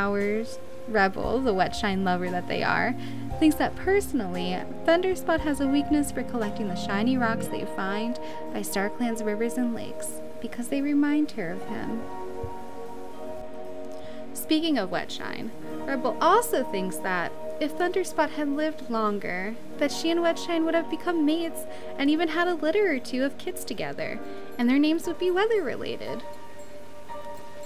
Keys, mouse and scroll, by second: 15.6 right click.